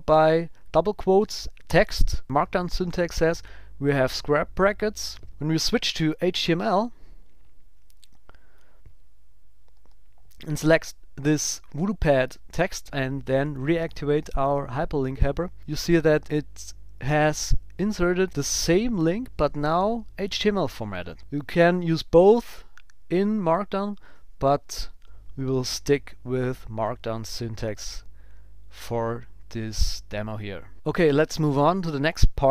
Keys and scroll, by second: 21.5 super+z, 30.7 super+s, 30.9 super+w.